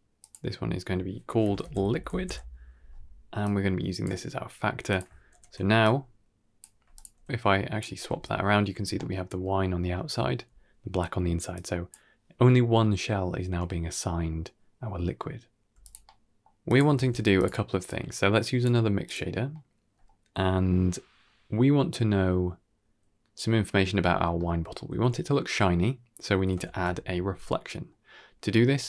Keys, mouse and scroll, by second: 0.1-2.2 drag, 3.3-3.9 drag, 4.8 click, 5.2 ctrl+h, 5.7-6.5 drag, 6.8 alt+s, 7.0-7.7 drag, 8.7 scroll down 2, 8.8-9.3 middle drag, 9.8 middle click, 11.4 click, 13.5 middle click, 13.9 scroll down 2, 14.0 middle click, 14.5-14.9 scroll down 2, 14.7 middle click, 15.0 click, 15.5 g, 15.9 middle click, 16.5 click, 16.8 shift+d, 17.7-18.5 drag, 18.9 click, 19.4-19.9 middle drag, 20.6 middle click, 24.2 middle click, 26.5 shift+a.